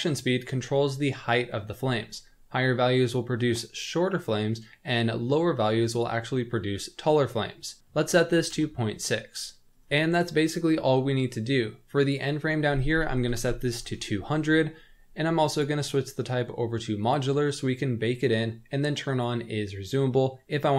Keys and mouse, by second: 5.9-9.8 drag, 12.0-15.1 drag, 13.3 KP_0, 15.6-17.1 drag, 19.1 click.